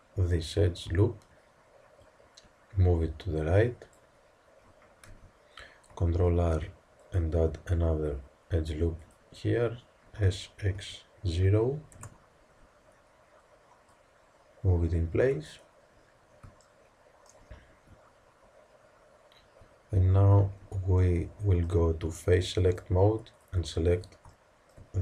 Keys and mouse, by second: 0.2 click, 2.0-3.9 drag, 5.1 z, 6.2 ctrl+r, 10.2 s, 13.8-15.7 drag, 15.7-16.9 middle drag, 20.6 z, 22.6-24.3 drag, 24.3-25.0 middle drag.